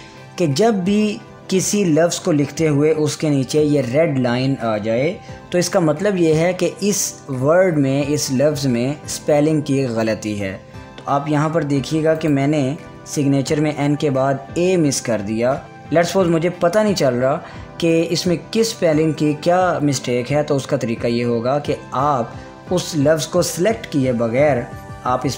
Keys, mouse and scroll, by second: 12.8 click.